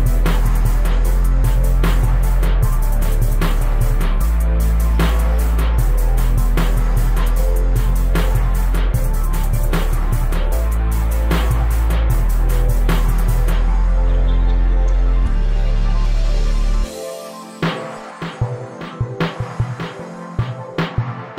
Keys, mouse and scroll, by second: 0.0 shift+right click, 0.2 ctrl+j, 0.7-2.3 drag, 2.8 click, 3.2 KP_0, 3.6 scroll down 7, 3.8-4.3 scroll up 14, 4.3 Tab, 4.5 right click, 7.4 right click, 11.3 Tab, 11.5 Tab, 11.8 right click, 14.2-14.9 right drag, 16.9 Tab, 17.5-19.1 drag, 19.1 Tab, 19.2 scroll down 2, 19.3 right click, 19.5 middle click, 19.7 scroll up 10, 19.9 right click, 20.1 shift+middle click, 20.3 shift+middle click, 20.8 KP_0, 21.0 shift+d.